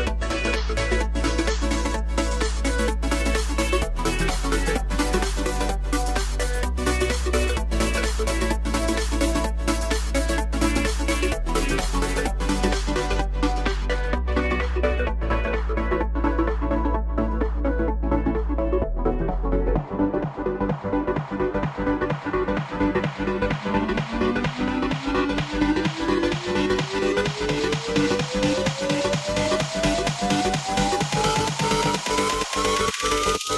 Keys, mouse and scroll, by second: 0.5 drag, 1.3 click, 2.5 click, 3.3 click, 4.0 KP_0, 4.5 z, 5.5 click, 6.6 click, 7.3 KP_0, 7.3 KP_0, 8.9 click, 9.6 h, 10.2 click, 10.6 click, 11.0 click, 11.4 click, 12.1 click, 13.0 click, 15.0 click, 16.1 click, 17.9 click, 19.9 g, 21.2 click, 21.9 click, 23.8 click, 24.4 click, 25.9 g, 28.8 g, 30.6 click.